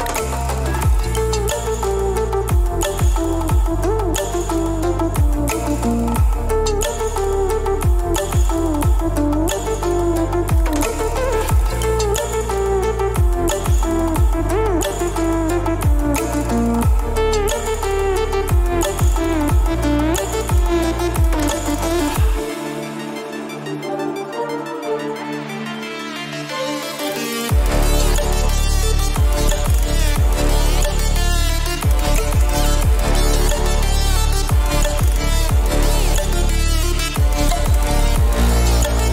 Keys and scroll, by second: 7.0 Return, 28.0 ctrl+o, 28.7 Return, 33.6 ctrl+t.